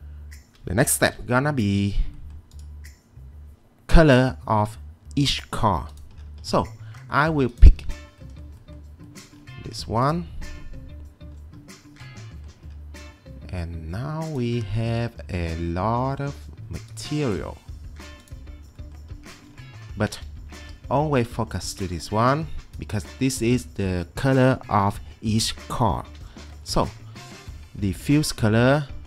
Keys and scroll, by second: 1.1 m, 20.6 ctrl+2, 26.7 Escape.